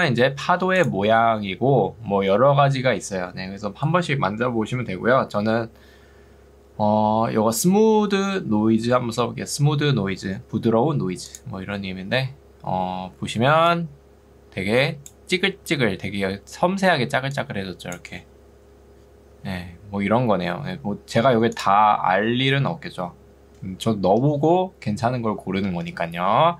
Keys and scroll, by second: 0.3 Escape, 13.3 ctrl+2, 15.7 Escape, 17.1 ctrl+2, 24.1 Escape.